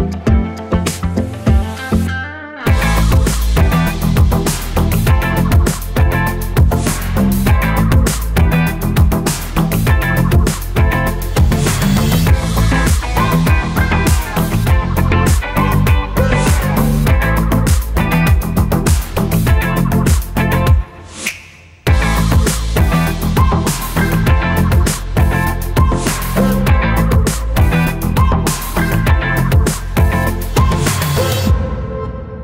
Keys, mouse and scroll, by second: 1.9 click, 8.9 click.